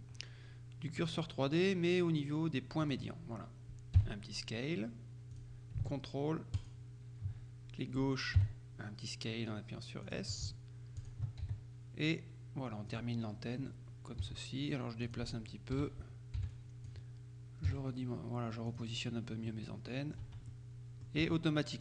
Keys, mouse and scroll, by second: 1.1 click, 2.9 click, 4.1 s, 5.4 click, 6.6 ctrl+click, 8.5 s, 10.1 click, 11.1 ctrl+click, 11.5 ctrl+s, 13.0 click, 14.3 g, 15.1 click, 15.8 a, 16.5 b, 16.6 click, 17.7 g, 18.7 click, 19.5-20.7 middle drag, 20.3 Tab, 21.3 Tab.